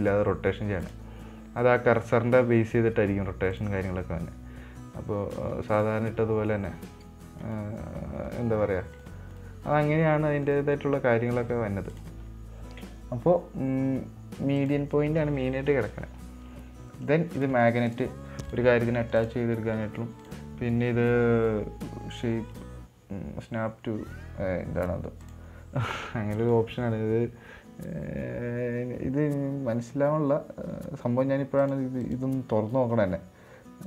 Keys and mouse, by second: 1.2-2.6 drag, 3.9-6.2 drag, 8.6 right drag, 9.3 right drag, 9.7 right click, 10.1 r, 11.1 middle click, 12.3-15.0 drag, 15.6 middle click, 16.1 middle click, 17.7 click, 18.3 click, 18.8 click, 19.5 click, 20.6 click, 26.7 click, 32.5 click.